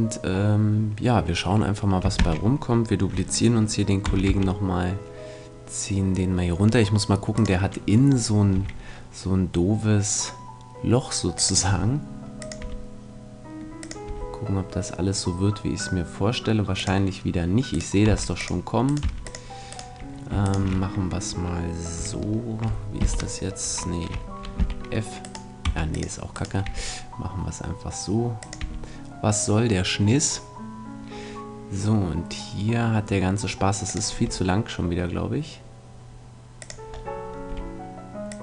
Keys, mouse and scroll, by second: 2.2 shift+d, 8.5 click, 8.5 e, 11.7-16.4 drag, 11.7 e, 12.6 e, 14.0 e, 17.2-18.6 drag, 17.7-22.3 right drag, 18.1 x, 19.0 x, 23.0 j, 24.6 f, 25.2-28.1 right drag, 25.6 x, 26.6 e, 28.5-30.4 drag, 28.6 e, 33.9-35.8 drag, 34.1 e, 36.8 click, 37.0 right click, 37.4-38.4 drag, 37.4 e.